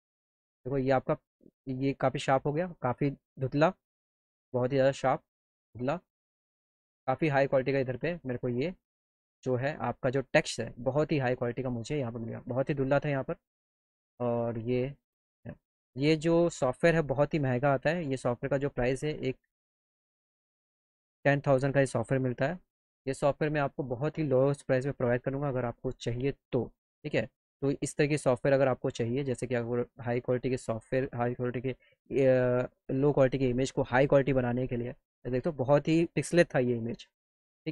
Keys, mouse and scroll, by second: 1.2-12.3 drag, 14.2-16.0 drag, 16.6 middle click, 18.2-19.8 drag, 27.5-36.6 drag.